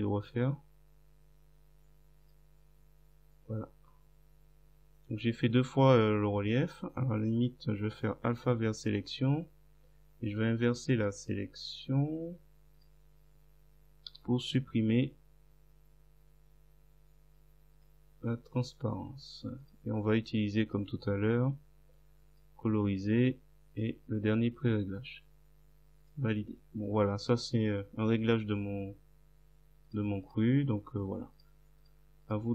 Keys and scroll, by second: 14.1 Delete.